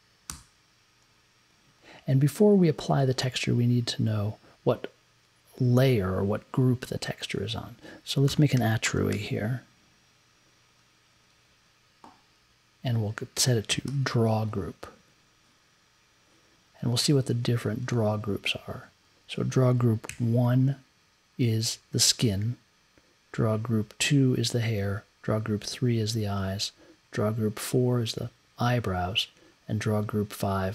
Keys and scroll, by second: 0.3 b, 8.0-9.6 typing, 13.5-14.3 typing, 20.1 Up, 23.3 Up, 24.5 Up, 24.7 Up, 26.3 Up, 29.3 Up.